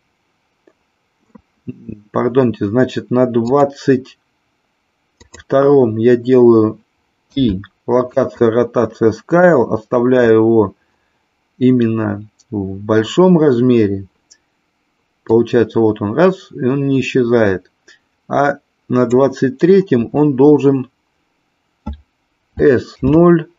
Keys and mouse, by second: 3.4 click, 5.3 click, 7.3 i, 15.3-19.3 drag, 22.5 s, 23.0 KP_0.